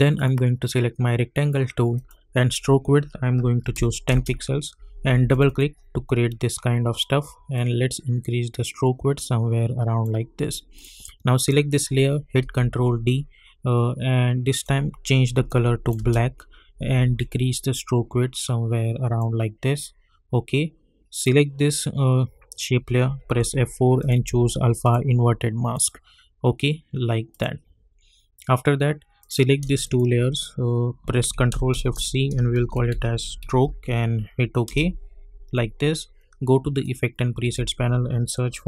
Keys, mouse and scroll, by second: 4.1 Return, 5.3-10.7 drag, 12.4 ctrl+d, 14.5 click, 15.9 Return, 17.3-21.1 drag, 23.3 F4, 24.0 click, 29.8 shift+click, 31.7 ctrl+shift+c, 32.3-34.2 typing, 34.7 Return, 36.8 click, 37.5 ctrl+a, 38.4-38.6 typing.